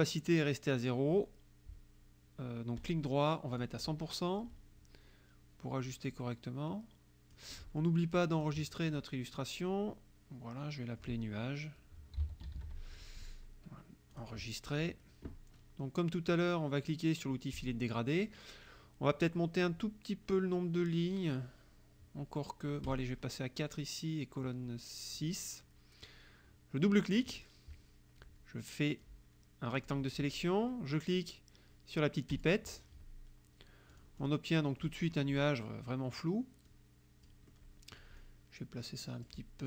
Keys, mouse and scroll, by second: 2.9 right click, 3.6 click, 6.1-7.6 drag, 8.4 click, 11.8-13.1 typing, 14.2 click, 17.6 click, 22.9 click, 25.2 click, 27.2 click, 29.0-30.1 drag, 32.4 click, 34.0 click, 34.9 click, 35.5 click, 36.7 click.